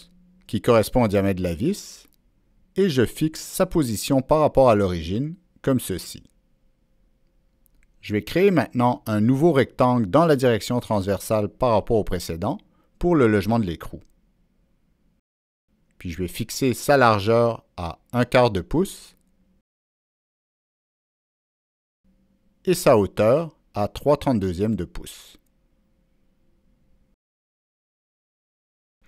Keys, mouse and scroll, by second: 1.8 Return, 2.9 Escape, 4.7-6.9 drag, 7.4 click, 9.7 right drag, 10.7-12.0 drag, 12.8 right click, 14.8 click, 14.9 right click, 15.7 click, 19.4 Return, 19.4 click, 21.2 click, 22.1 click, 22.2 Return, 24.6 click, 26.0 Return, 28.1-29.0 drag.